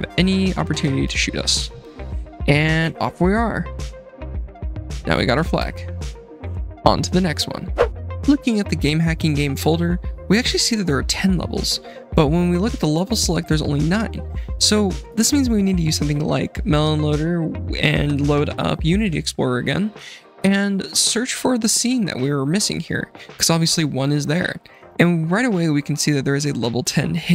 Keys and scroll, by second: 1.4 F7, 3.2-6.4 typing, 19.4 F7.